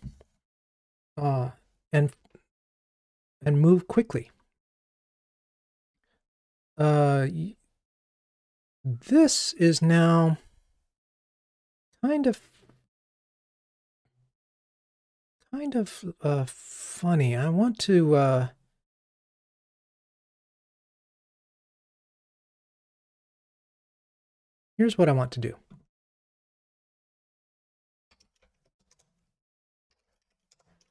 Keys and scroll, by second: 30.6 Return.